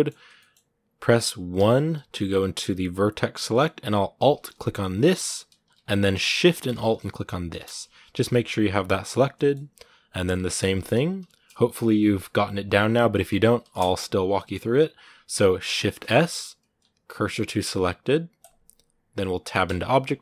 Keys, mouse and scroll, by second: 1.3 1, 3.2-5.0 shift+middle drag, 5.0 alt+right click, 5.6-7.2 middle drag, 7.2 alt+shift+right click, 7.4 scroll down 1, 7.9 g, 9.1 middle click, 9.8 scroll up 2, 10.1-18.3 middle drag, 18.3 shift+s.